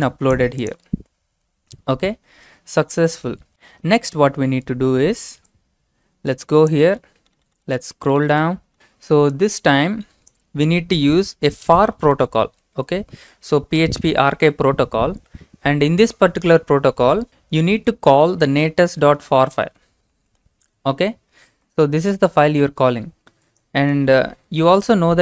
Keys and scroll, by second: 4.3 alt+Tab, 11.5 typing, 18.9 typing, 24.6 typing.